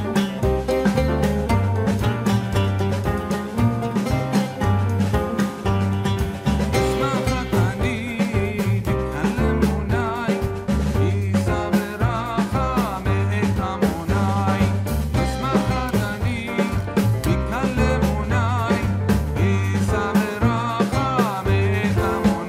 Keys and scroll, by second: 1.5 Return, 2.8 ctrl+h.